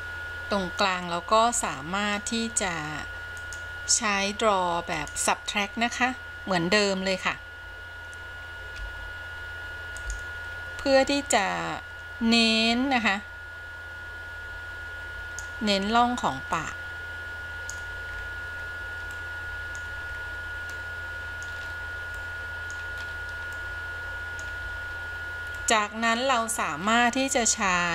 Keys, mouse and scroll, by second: 0.0-0.5 scroll up 1, 1.1-1.6 scroll up 1, 1.6 middle click, 3.5 click, 5.1 click, 8.9 f, 10.1 f, 11.5-15.7 drag, 16.7-18.0 drag, 18.3-19.3 scroll down 4, 19.3 middle click, 20.4 scroll down 3, 21.0 middle click, 21.8-22.4 scroll up 2, 22.4 middle click, 23.0-23.7 scroll up 2, 23.7 middle click, 25.0-25.8 scroll down 3, 25.8 middle click, 26.9-27.6 scroll up 2, 27.6-27.9 scroll down 2.